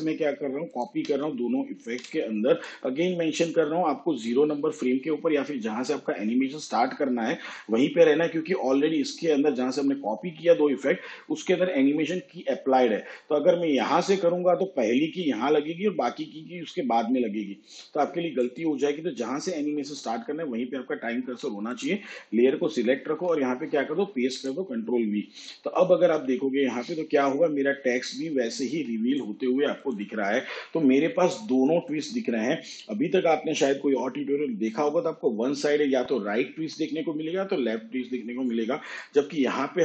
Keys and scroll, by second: 2.0 ctrl+c, 23.4 ctrl+v.